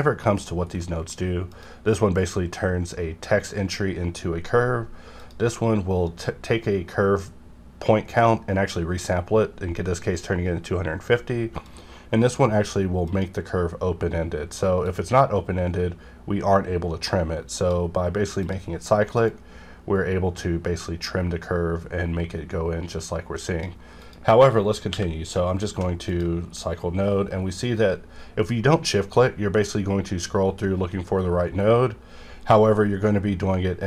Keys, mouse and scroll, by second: 0.8 middle click, 1.5 click, 5.2 click, 11.6-24.0 drag, 24.9 q, 26.1 click, 26.5-27.1 scroll up 2, 27.1 scroll down 1, 27.7 scroll up 1, 28.5 scroll up 1, 29.2-29.8 scroll down 2, 30.5-31.7 scroll down 1, 31.7-32.2 scroll down 1, 32.2-32.9 scroll down 1, 32.9-33.3 scroll down 1, 33.3 scroll up 1.